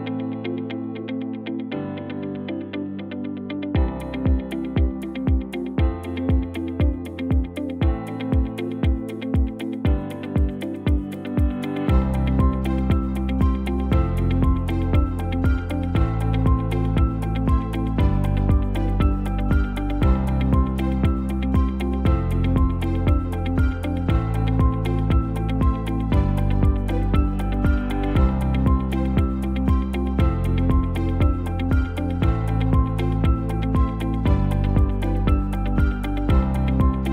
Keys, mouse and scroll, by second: 16.0 shift+d.